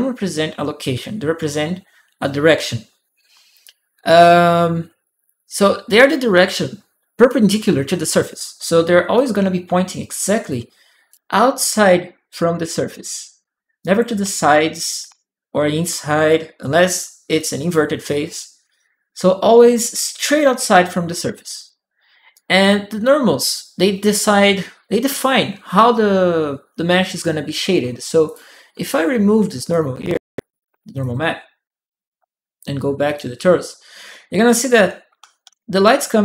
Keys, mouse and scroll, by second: 8.9-9.9 right drag, 9.4 w, 10.1 right click, 10.2 right click, 10.3 click, 13.6 click, 14.4 a, 14.6 right click, 14.8 d, 15.6-17.5 drag, 15.9 right click, 17.1 right click, 21.4-22.8 drag, 22.1-23.2 right drag, 28.0 click, 29.5 alt+click, 30.8 alt+click, 32.8 alt+click, 34.3-35.5 alt+drag, 35.2 s.